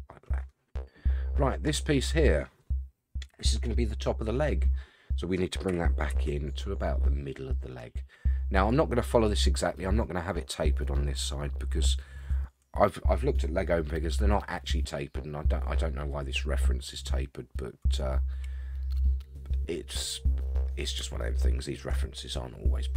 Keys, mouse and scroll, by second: 1.6 click, 3.3 KP_1, 5.7 g, 19.9-20.5 scroll up 2, 20.5-21.0 scroll down 2, 21.2-22.0 shift+middle drag, 22.6 scroll up 1.